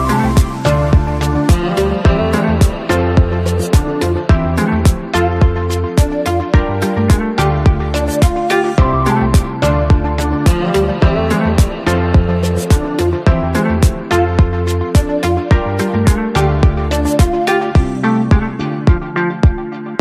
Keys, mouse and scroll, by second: 4.9 scroll down 1, 13.5 ctrl+=, 16.0-16.4 scroll down 1.